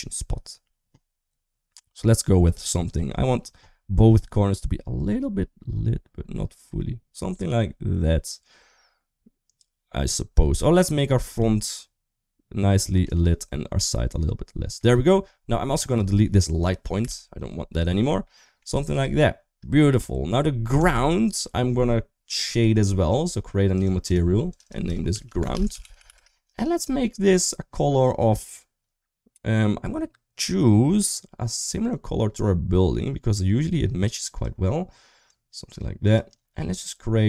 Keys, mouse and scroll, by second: 13.9 middle click, 15.7 click, 16.8 typing, 18.0 middle click, 18.6 shift+middle click, 20.5 click, 23.6 click, 23.8 click, 24.3 click, 24.6-25.9 shift+drag, 27.1 click.